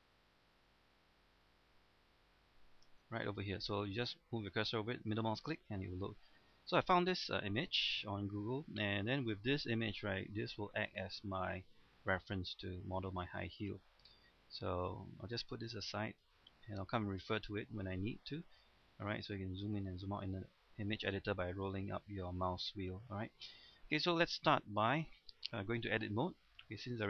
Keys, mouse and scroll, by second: 0.3-5.4 scroll up 1, 5.4 middle click, 6.0-6.4 scroll up 1, 6.8-7.8 scroll down 1, 7.8-15.5 scroll up 1, 15.5-16.8 drag, 17.3-17.6 scroll down 1, 19.0-19.3 scroll up 1, 19.6-21.5 scroll down 1, 21.5 scroll up 1, 21.7-22.4 scroll down 1, 23.4 middle click, 24.2 scroll up 1, 24.5 middle click, 24.9-25.7 scroll down 1, 25.8 Tab, 26.3-26.6 scroll down 1, 26.6 middle click, 26.9-27.0 scroll up 1.